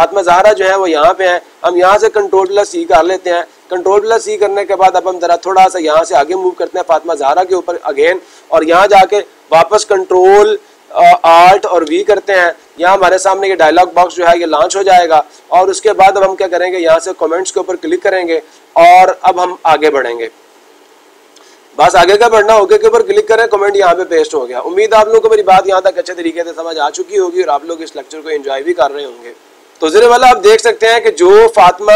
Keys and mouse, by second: 1.1-2.1 drag, 6.0 click, 8.1-9.2 drag, 15.6-16.7 drag, 16.9-18.0 drag, 22.3-23.4 drag.